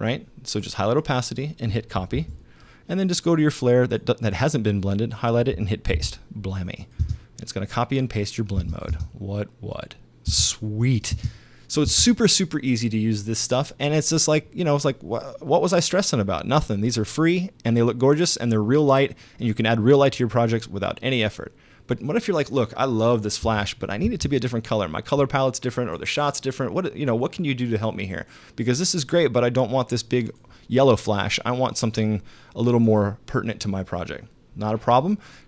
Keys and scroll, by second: 2.2 super+c, 6.0 super+v, 7.0 super+space, 8.6 space, 10.3 space, 23.4 space.